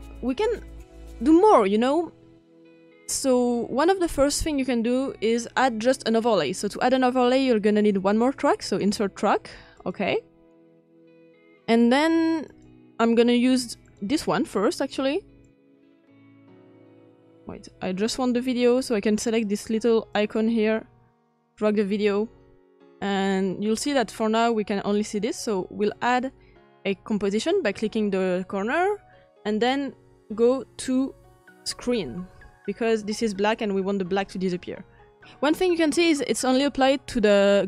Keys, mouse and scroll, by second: 16.9-17.9 drag, 20.9-27.3 drag.